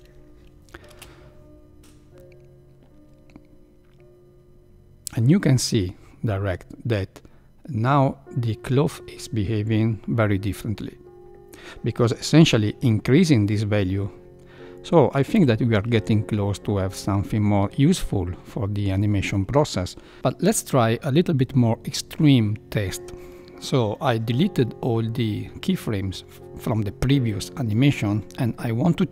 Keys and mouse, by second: 0.8 space, 15.9 shift+Left.